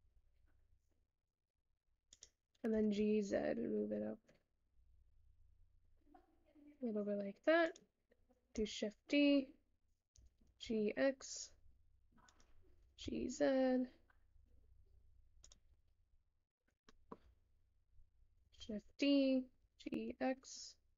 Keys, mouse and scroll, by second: 8.5 shift+d, 15.9-16.9 scroll down 9, 16.9 shift+middle click, 17.4 scroll up 1, 18.6 shift+d.